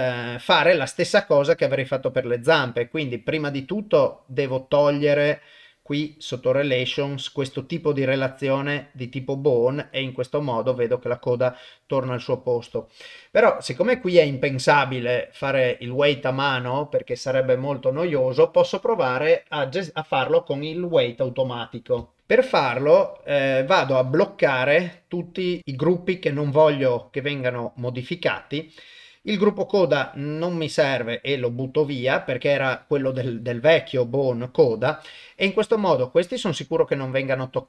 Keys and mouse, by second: 1.4 click, 4.0 click, 6.3 click, 6.6 middle click, 8.8 click, 9.9 click, 11.3 click, 13.7 click, 14.1 ctrl+s, 15.2 click, 15.5 shift+middle click, 22.3 ctrl+alt+shift+click, 23.8 ctrl+alt+shift+middle click, 25.6 click, 25.6 click, 26.1 click, 27.1 click, 28.8 click, 30.0 middle click, 31.1 click.